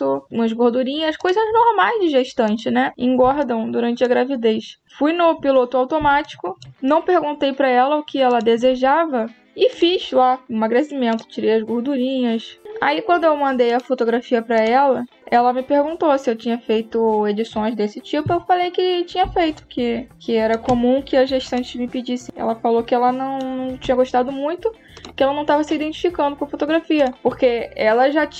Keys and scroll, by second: 3.1 space, 5.8 space, 19.1 space, 22.2 space.